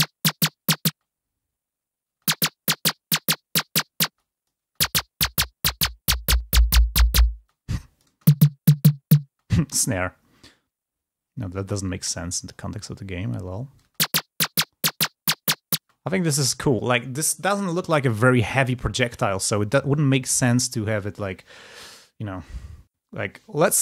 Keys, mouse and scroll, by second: 0.8 space, 1.1-1.6 scroll down 2, 1.6 scroll up 2, 2.0 space, 4.3 click, 4.3 space, 5.2-5.6 scroll up 2, 6.2-6.6 scroll up 2, 7.3 click, 7.3 space, 10.2-10.6 scroll down 2, 10.9-11.6 scroll down 2, 11.6-12.6 scroll down 2, 12.6-13.6 scroll down 1, 13.6-14.0 scroll up 2, 13.7 space, 15.8 space.